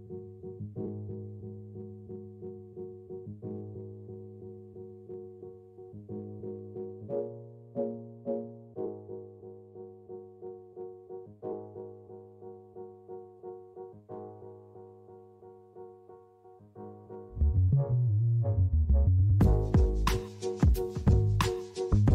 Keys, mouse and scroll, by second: 0.4 click, 1.5 g, 2.3 z, 3.4-3.9 scroll up 3, 3.9-5.4 scroll down 8, 9.1-9.7 scroll up 2, 9.7-11.1 scroll up 4, 11.1-11.6 scroll up 2, 11.6-12.8 scroll down 4, 12.8-14.1 scroll up 1, 14.1 click, 15.1 Tab, 15.5 middle click, 18.9 click, 19.3 middle click, 20.9 middle click.